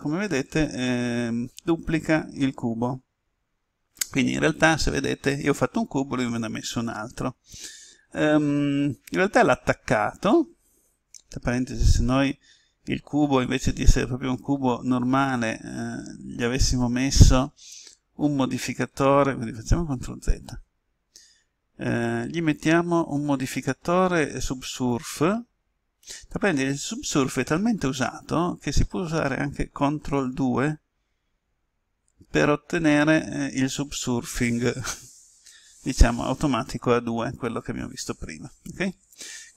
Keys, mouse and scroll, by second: 4.4-6.3 middle drag, 20.0 ctrl+z, 24.7 click.